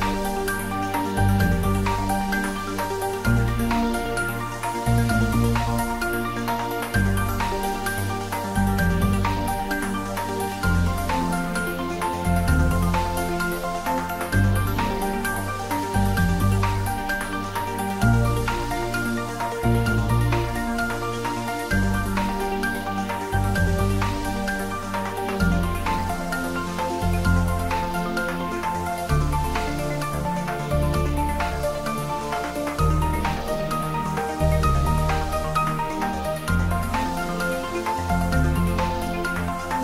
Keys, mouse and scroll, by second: 1.6 click, 2.3 ctrl+r, 3.1 click, 4.0 Tab, 5.0-7.4 middle drag, 7.4 ctrl+middle click, 8.3 shift+click, 10.4 click, 11.0-12.2 ctrl+middle drag, 12.2 g, 13.4 click, 13.8 ctrl+s, 14.1 ctrl+middle click, 14.4-16.4 middle drag, 16.4 ctrl+middle click, 17.0 shift+middle click, 17.5-19.8 typing, 18.6 click, 22.9 click, 23.3 ctrl+s, 23.8 click, 24.3 ctrl+s, 34.4 click, 35.9 click, 36.7 ctrl+middle click, 37.3 shift+middle click, 37.7-38.6 typing.